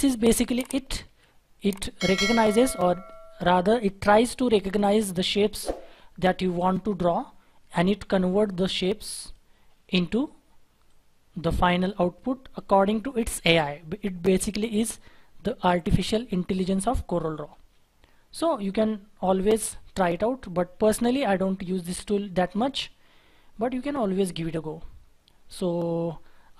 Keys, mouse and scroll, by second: 0.0 Delete, 0.7 Delete, 1.0 shift+F4, 17.4-17.9 scroll down 1, 18.0-18.9 scroll up 1, 23.0-23.5 scroll down 1, 23.5-25.3 scroll up 1.